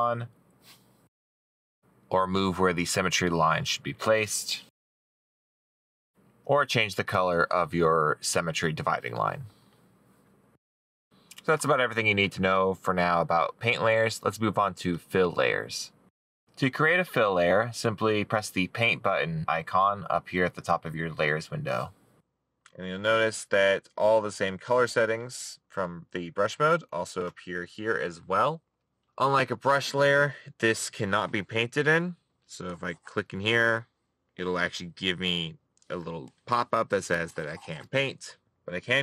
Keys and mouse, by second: 0.2 middle click.